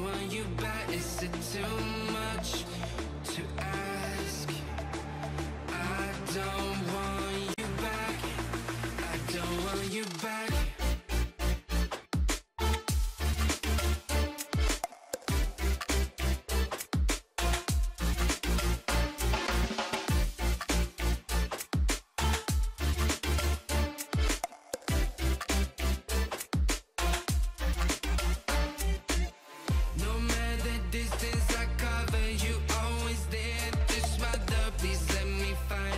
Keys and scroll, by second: 8.6 i.